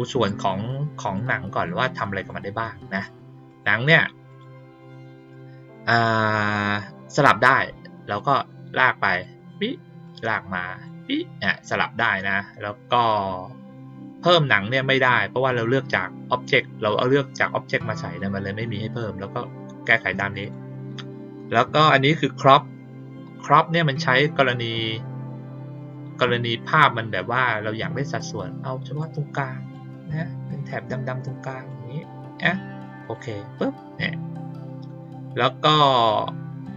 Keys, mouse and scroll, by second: 0.2 click, 1.0 click, 1.5 click, 2.1 click, 2.9 click, 3.4 click, 4.2 click, 4.7 click, 8.1-9.2 drag, 10.0 click, 14.9 click, 20.4 click, 25.7 click, 28.9 click, 30.6-31.6 drag, 33.0 click.